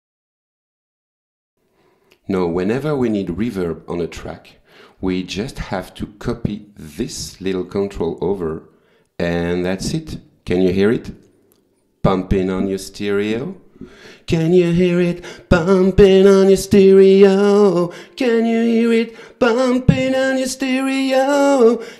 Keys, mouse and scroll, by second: 0.3 scroll up 2, 1.5 click.